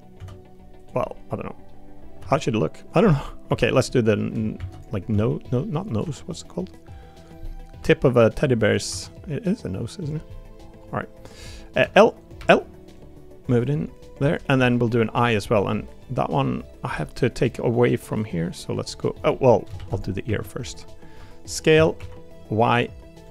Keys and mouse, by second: 0.1 s, 1.0 middle click, 3.1 middle click, 3.5 3, 3.9 middle click, 4.6 shift+d, 5.1 s, 6.0 g, 7.4 middle click, 7.8 g, 8.9 e, 10.3 middle click, 11.8 l, 12.2 click, 12.4 l, 12.9 click, 14.1 click, 14.6 middle click, 15.7 middle click, 16.4 middle click, 16.9 middle click, 17.3 middle click, 18.1 middle click, 19.4 middle click, 19.7 shift+d, 20.2 s.